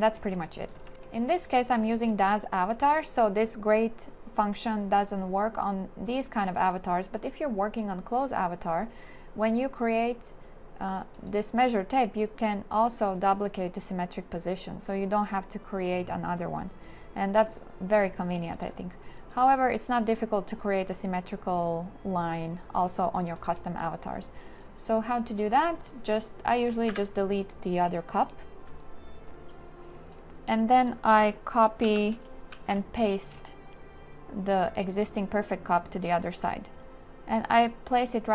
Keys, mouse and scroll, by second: 0.9 q, 26.9 Delete, 31.9 ctrl+c, 32.6 ctrl+d.